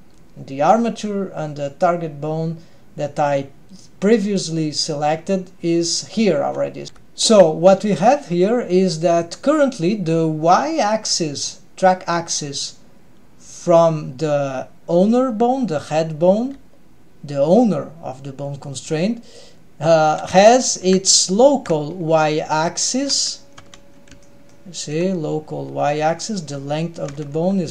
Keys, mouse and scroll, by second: 6.8 ctrl+alt+shift+super+r, 6.8 g, 17.7 g, 20.0-20.4 scroll up 2, 20.4-20.9 shift+middle drag, 21.8-22.3 scroll up 2, 22.7-23.0 shift+middle drag, 23.6 Tab, 24.2-24.8 shift+middle drag, 27.1 Tab.